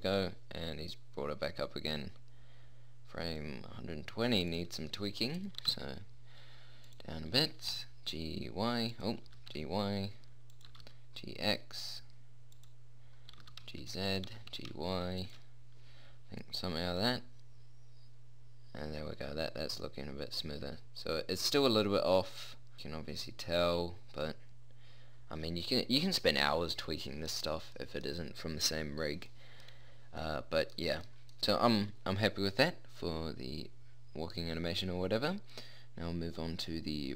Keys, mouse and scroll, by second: 4.7-5.9 drag, 5.9 g, 7.7 g, 8.1 y, 9.6 g, 11.1 g, 11.2 middle click, 13.6 g, 14.6 g, 17.3 middle click, 19.3-20.6 middle drag, 27.4-29.9 middle drag, 34.8-36.3 middle drag.